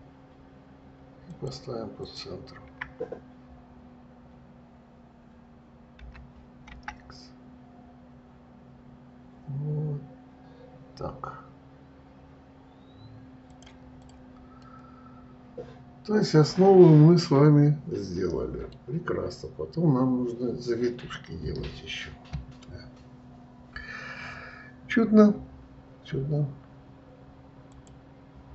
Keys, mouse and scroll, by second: 0.0 shift+click, 1.6 shift+click, 2.3 shift+click, 6.3 g, 14.3 click, 14.9-18.1 middle drag, 28.0 click.